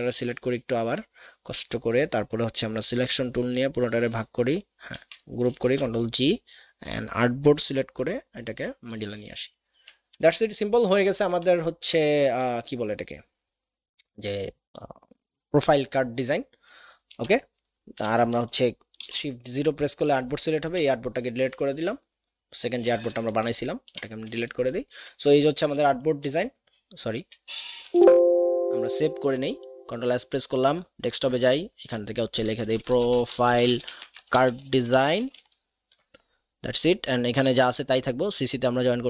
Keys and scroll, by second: 5.5 ctrl+g, 17.2 Delete, 19.0 shift+o, 20.6 Delete, 24.0 Delete, 25.6 ctrl+d, 27.6 ctrl+s, 32.7-35.9 typing.